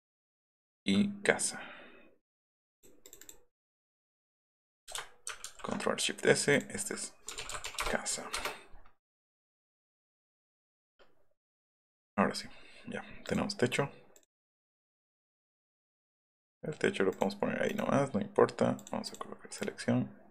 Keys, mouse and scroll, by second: 0.3 click, 2.2 click, 2.7 click, 3.0 click, 3.2 click, 3.8 click, 3.9 click, 5.4 ctrl+alt+shift+s, 6.5 click, 7.0-8.0 typing, 8.3 Return, 12.0 click, 13.2 click, 14.7 F1, 15.7 click, 17.1 click, 17.6 right click, 18.7 click, 19.0 click, 19.5-20.3 middle drag.